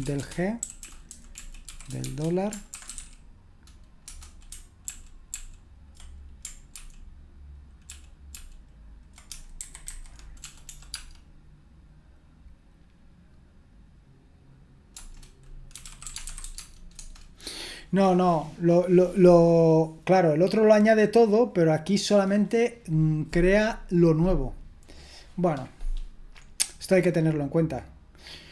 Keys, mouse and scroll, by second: 0.0-3.0 typing, 4.0 Return, 4.9 ctrl+p, 5.1 typing, 5.3 ctrl+p, 7.9 ctrl+o, 9.6 ctrl+p, 10.9 typing, 14.9 Return, 15.5-16.9 typing, 17.0 Return.